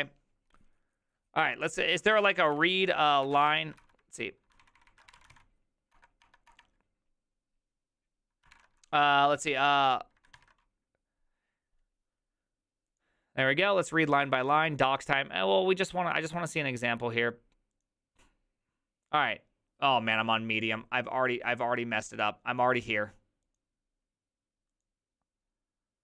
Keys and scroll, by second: 2.1-5.8 typing, 5.9 Return, 6.2 Return, 6.5 Return, 8.5 ctrl+l, 10.3 ctrl+shift+Tab.